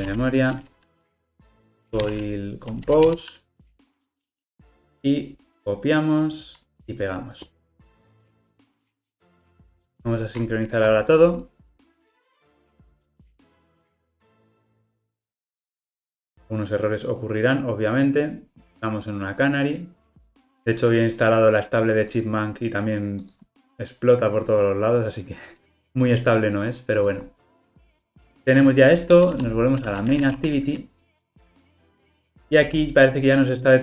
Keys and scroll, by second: 8.9 super+v, 32.0 alt+Return.